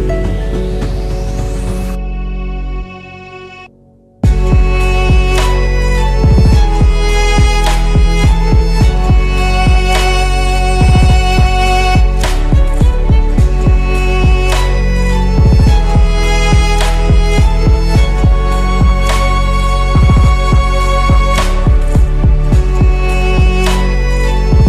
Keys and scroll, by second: 1.4 Delete, 2.5 Tab, 12.0 8, 12.1 F2, 13.8 Tab, 19.1 Delete, 20.6 ctrl+z, 21.3 Delete.